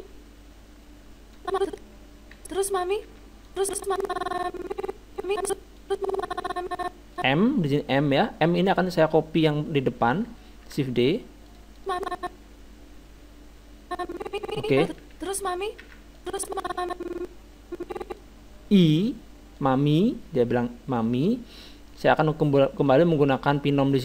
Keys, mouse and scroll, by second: 1.4-5.4 drag, 2.4 alt+a, 3.2 alt+a, 5.8-7.5 drag, 8.7-10.5 right drag, 10.7 shift+d, 11.8-13.5 drag, 15.1 alt+a, 16.2 alt+a, 16.2-17.9 drag, 19.6-21.4 drag, 21.0-22.7 middle drag, 22.8-24.0 drag.